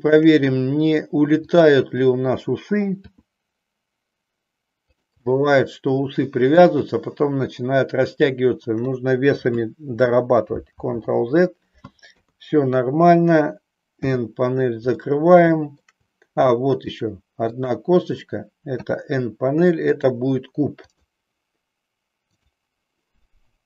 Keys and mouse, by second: 2.9 r, 5.0 click, 5.2-6.8 middle drag, 10.9 ctrl+z, 12.0 KP_3, 14.0 n, 15.0 shift+middle click, 16.7 middle click, 17.5 shift+click, 18.9 n, 19.9-21.1 drag, 22.4 click.